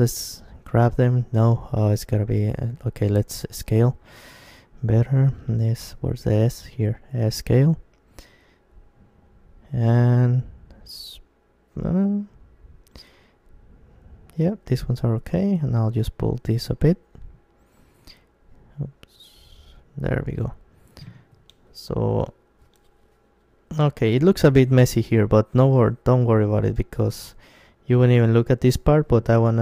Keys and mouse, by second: 4.4-6.3 right drag, 5.7 s, 6.4 s, 8.4-10.4 drag, 12.1 c, 13.7 right click, 14.0 middle click, 14.1-15.7 right drag, 14.7 f, 16.6 ctrl+z, 17.8 g, 21.1-27.7 drag, 21.7-23.0 right drag, 22.6 g, 23.7-27.5 right drag, 23.8 g, 25.4 g, 26.9 g, 27.7 right click, 28.2-29.6 drag, 28.8 g.